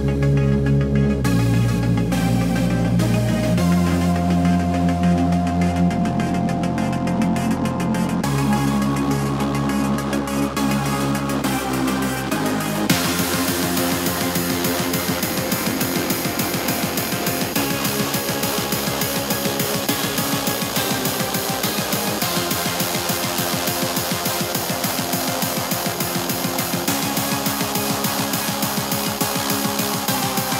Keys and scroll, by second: 2.2 KP_7, 2.5 Return, 9.4 super+d, 9.6 shift+super+h, 10.1 shift+super+h, 10.5 shift+super+h, 11.4-12.4 typing, 12.6 Home, 13.2 shift+super+h, 13.3 Home, 13.7 KP_4, 14.0 super+z, 14.2 super+s, 16.2 super+s, 20.7 shift+p, 22.2 shift+c, 24.1 shift+super+h, 24.2 shift+v, 24.5 shift+super+h, 24.6 super+s, 25.7 c, 25.8 Escape.